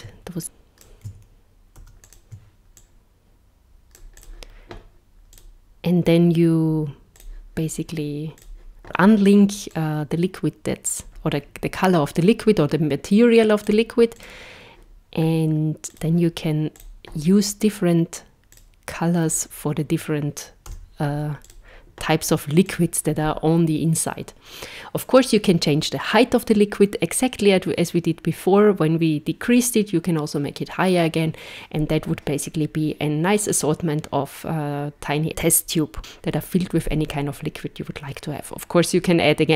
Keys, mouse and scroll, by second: 0.4 click, 2.1 shift+d, 2.8 click, 4.2 click, 5.3 click, 7.2 click, 8.4 click, 8.8 click, 13.6 click, 14.2 click, 15.9 click, 16.8 click, 20.7 z, 22.7 click.